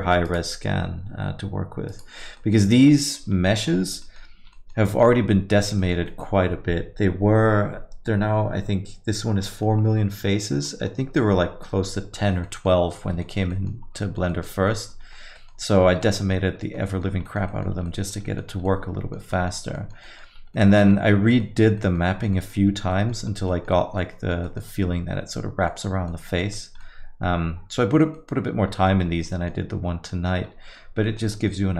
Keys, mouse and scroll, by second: 20.8 right click, 21.1 right click, 22.3 right click, 22.5 right click, 28.4 right click.